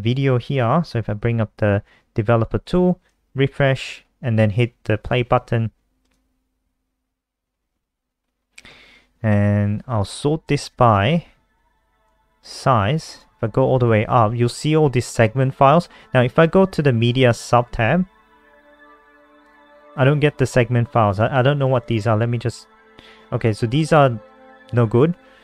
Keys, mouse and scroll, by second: 0.7 F12, 3.2 ctrl+r, 4.0 scroll up 1, 4.8-5.1 scroll up 2, 5.8 click, 10.2 click, 11.8 click, 21.5 click, 23.7 click.